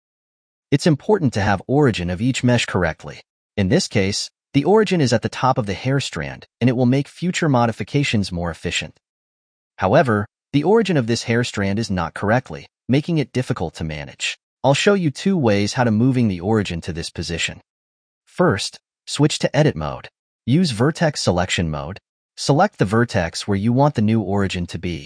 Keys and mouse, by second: 1.2-2.2 shift+middle drag, 2.2 click, 2.8-3.7 middle drag, 3.7 r, 6.2-6.6 middle drag, 6.6 r, 7.2 middle drag, 7.4 r, 7.8 middle click, 8.0 r, 8.2 middle drag, 8.4 r, 8.9-9.6 middle drag, 9.6 click, 10.1 r, 13.3 ctrl+z, 17.6-19.2 middle drag, 19.2 Tab, 21.5 1, 22.8 alt+z, 23.8 click.